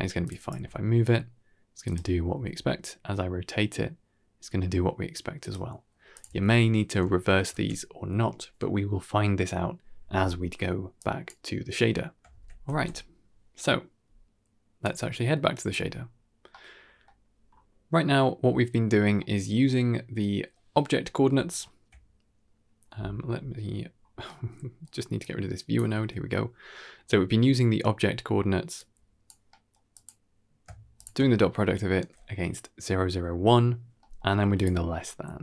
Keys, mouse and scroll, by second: 0.1 click, 0.4 g, 2.3 r, 6.0 click, 6.2 alt+s, 7.5 alt+s, 10.9 drag, 12.2 ctrl+s, 13.2 shift+space, 14.7-15.6 drag, 16.4 middle click, 16.9 middle click, 17.2-18.3 scroll up 1, 18.3-19.1 scroll up 3, 19.1-19.5 middle drag, 21.4 ctrl+shift+click, 22.7-23.3 scroll down 1, 23.3-24.1 scroll down 8, 24.1-24.8 middle drag, 25.1-25.6 drag, 25.8 x, 26.8-27.2 scroll up 3, 27.2 scroll down 1, 27.3 middle click, 28.6 click, 29.1 middle click, 29.4 middle click, 29.8 click, 30.9 ctrl+shift+click, 33.9 middle click, 34.5 ctrl+shift+click.